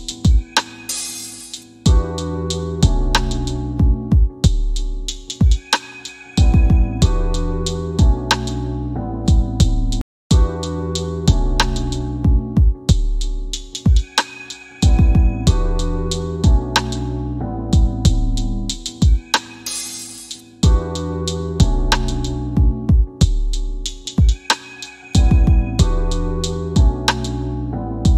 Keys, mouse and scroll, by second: 3.0-4.3 typing, 6.7 click, 12.8 click, 14.2 KP_3, 14.3 KP_Enter, 19.2 KP_3, 20.5 KP_Enter, 23.9 middle click, 25.7 w, 26.6 click.